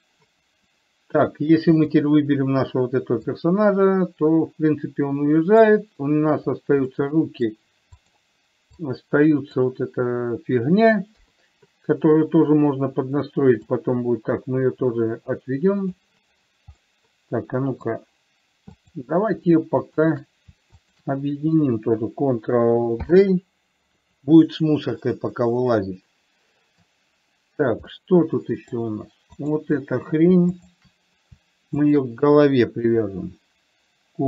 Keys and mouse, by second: 1.1-1.6 middle drag, 2.1 click, 3.7-6.1 drag, 7.3-7.8 middle drag, 8.4 click, 9.3-9.9 drag, 11.6 KP_3, 14.1-16.3 drag, 17.2-18.3 middle drag, 19.3 click, 20.3 shift+click, 21.3 shift+click, 23.3 ctrl+j, 25.3-27.2 middle drag, 28.3-29.1 middle drag, 29.7 click, 30.9 shift+click, 32.1 shift+click.